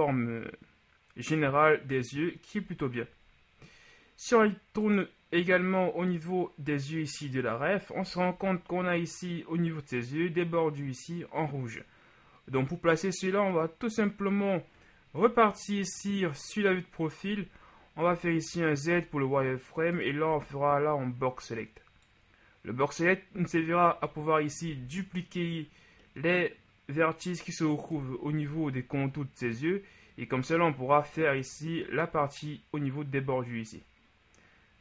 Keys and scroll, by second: 2.7 KP_1, 15.2 KP_3, 18.2 Tab, 24.1 KP_1, 24.6 z, 28.0 KP_1.